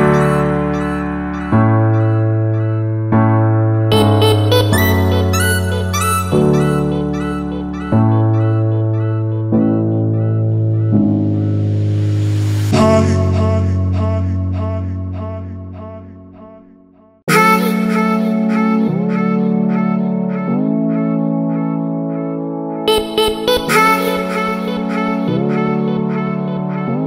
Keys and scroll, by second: 1.6 super+z, 4.6 shift+super+u, 11.9 super+u, 16.0 super+z.